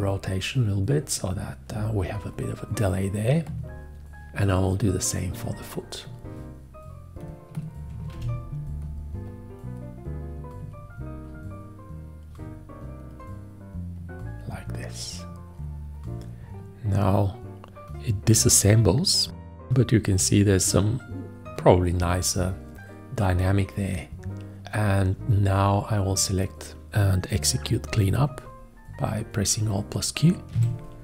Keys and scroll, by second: 8.2 ctrl+v, 30.6 alt+q.